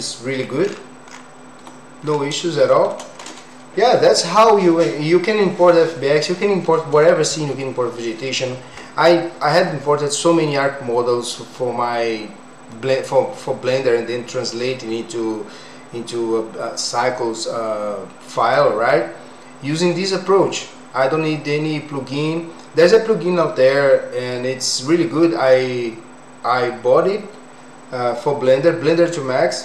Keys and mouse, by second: 2.7 shift+middle click, 28.8 middle click.